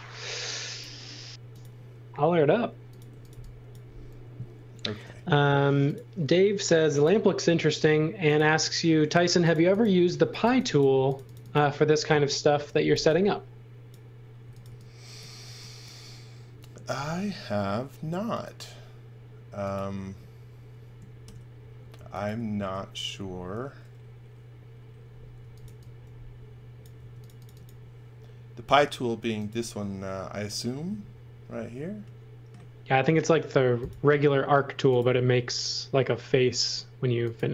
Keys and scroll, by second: 1.3 m, 2.8-5.0 typing, 8.9 space, 10.0-11.0 typing, 12.5 x, 12.9 v, 14.1-15.4 typing, 16.9 r, 21.2 shift+5, 22.5 shift+5, 25.1-26.9 typing.